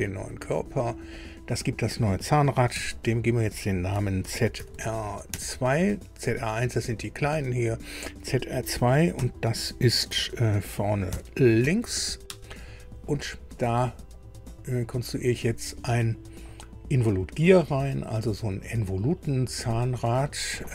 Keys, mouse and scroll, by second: 0.3-0.6 scroll down 2, 1.1 click, 2.7 F2, 4.2 shift+z, 4.6 shift+r, 5.3 2, 9.1 -, 11.1 shift+v, 11.6 shift+l, 12.3 Return, 14.1 click, 20.2 click.